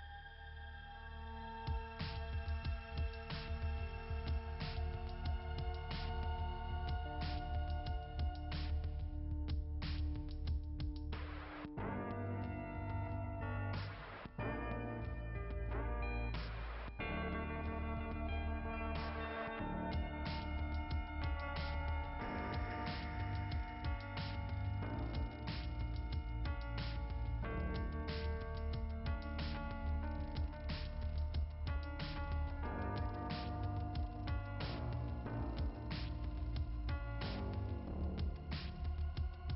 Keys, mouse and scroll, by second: 3.0 click, 4.8 click, 5.2 click, 5.5 click, 6.5 click, 9.8 click.